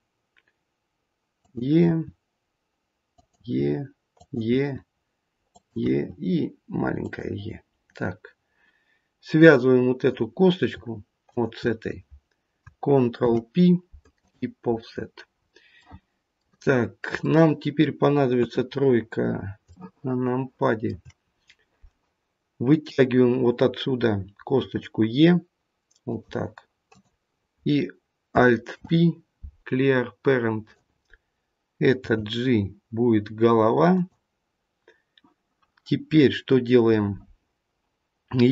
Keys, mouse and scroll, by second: 1.9 e, 4.4 e, 5.8 e, 7.7-8.7 scroll down 1, 9.3 click, 11.3 shift+click, 13.1 ctrl+p, 14.8-15.9 scroll down 6, 15.7 middle click, 16.7-17.2 scroll up 2, 17.2 middle click, 18.3 KP_3, 19.0 scroll up 1, 19.6 shift+middle click, 19.6 scroll up 1, 21.3 scroll up 1, 22.7 click, 25.7 e, 26.9 click, 28.7 alt+p, 31.9 g.